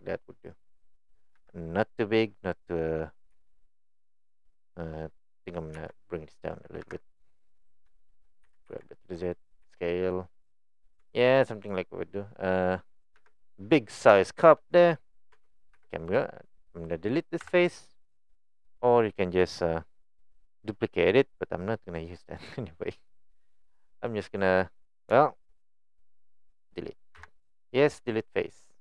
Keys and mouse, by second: 1.4 KP_1, 3.3 s, 4.9 middle click, 6.8 KP_1, 8.0 shift+middle click, 8.5 g, 9.7 s, 11.0 Tab, 11.7-12.6 middle drag, 13.2 KP_1, 14.3 middle click, 14.7 middle click, 15.4 Tab, 15.7 3, 16.1 click, 17.4 Delete, 25.2 shift+middle click, 25.7 middle click, 27.2 Delete.